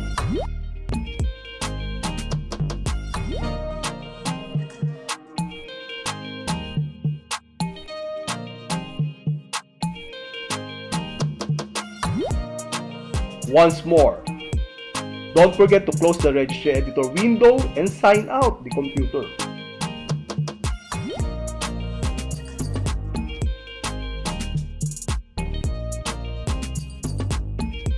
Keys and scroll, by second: 2.5 alt+e, 6.8 d, 14.2 space, 17.5 Left, 18.5 Left, 19.7 Left, 20.3 Left, 21.3 Left, 22.5 Left, 23.1 Left, 24.1 Left, 24.9 Left, 25.7 Left, 26.5 Left.